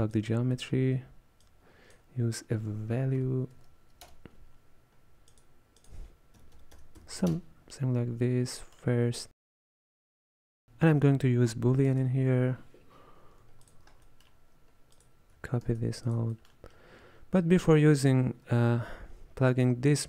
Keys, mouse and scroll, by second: 0.6-1.5 middle drag, 1.5 click, 5.8-8.7 drag, 8.7-9.6 middle drag, 9.6 click, 12.0 space, 14.1-15.0 middle drag, 15.0 click, 15.8 shift+d, 16.4-16.9 middle drag, 16.9-17.4 scroll up 2, 17.4 click, 19.7 drag.